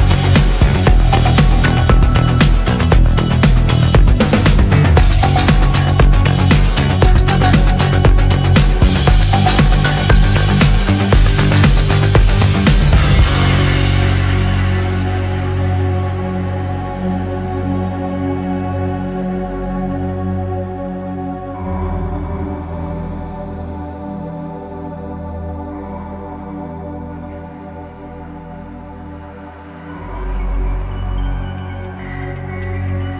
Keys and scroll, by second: 14.0 space, 14.8 ctrl+z, 21.8 space.